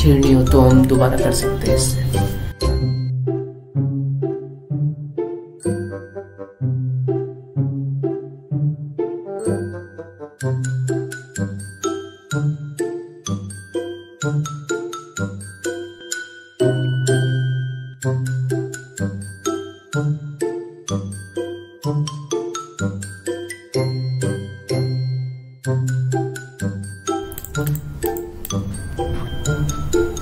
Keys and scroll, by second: 3.6 ctrl+z, 4.1 ctrl+z, 4.4 ctrl+z, 4.9 ctrl+z.